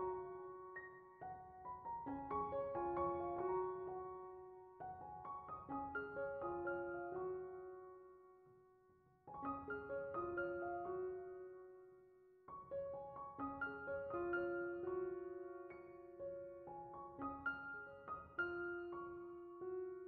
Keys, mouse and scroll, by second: 3.3 click, 6.3 click, 10.0 click, 10.6-11.6 middle drag, 13.3-14.7 drag, 15.5 click, 16.0 click, 17.0 drag, 17.4-18.6 drag, 18.9 click, 19.4-20.0 drag.